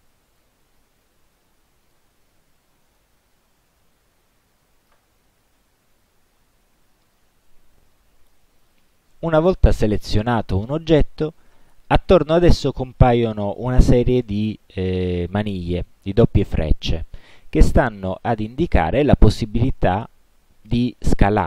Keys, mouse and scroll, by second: 0.4 click, 1.2-2.3 drag, 3.1-5.2 drag, 8.7 click.